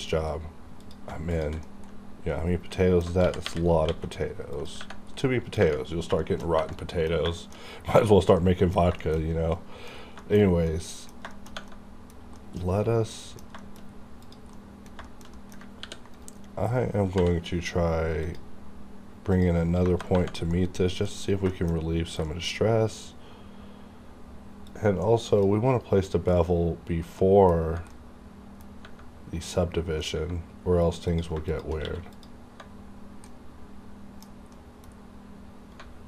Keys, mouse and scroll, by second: 0.0 click, 1.3 shift+click, 1.6 middle click, 2.3 middle click, 3.2 g, 3.8 x, 4.4 click, 5.2 middle click, 5.8 scroll down 1, 6.2 shift+middle click, 6.7 middle click, 7.0-8.1 scroll down 3, 7.4 shift+middle click, 8.1 scroll down 1, 8.4 middle click, 8.8-10.0 scroll down 5, 9.0 shift+middle click, 10.2 shift+middle click, 10.4 shift+scroll up 2, 10.7 middle click, 11.5 shift+Tab, 11.7-13.6 middle drag, 13.8-14.1 scroll up 1, 14.1 click, 14.5 middle click, 15.3 shift+scroll up 1, 15.3 middle click, 15.8 ctrl+r, 16.1 right click, 17.1 k, 18.1 click, 19.8 KP_Enter, 20.5 middle click, 21.1-22.1 scroll up 3, 21.5 shift+middle click, 22.2 shift+middle click, 24.6-26.2 drag, 26.2 middle click, 27.6 scroll up 1, 27.9 middle click, 29.5-31.0 middle drag, 31.0 click, 31.8 q, 32.1 click, 32.8 scroll down 1, 33.3 middle click, 34.9-35.8 scroll up 1.